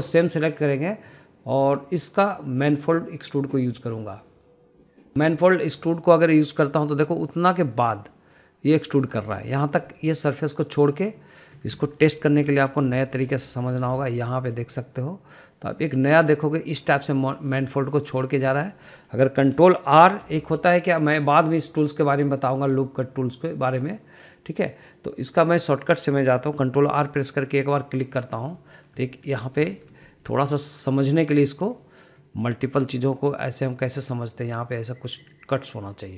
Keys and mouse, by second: 0.1 click, 0.7 shift+click, 1.1 middle click, 2.1-6.5 drag, 6.8 middle click, 8.0 click, 10.3 middle click, 11.0 middle click, 12.3 middle click, 13.2 shift+middle click, 13.6 middle click, 14.0 shift+middle click, 14.3 middle click, 14.9 shift+middle click, 15.3 click, 15.6 middle click, 16.4 click, 18.0 middle click, 18.8 shift+middle click, 19.2 middle click, 19.6 shift+middle click, 19.9 middle click, 22.4-26.3 drag, 26.7 middle click, 29.0 click, 29.6 middle click, 30.1 shift+middle click, 30.5 middle click, 30.8 shift+middle click, 31.1 middle click, 32.3 click, 32.9 middle click, 33.9 click, 35.0 click.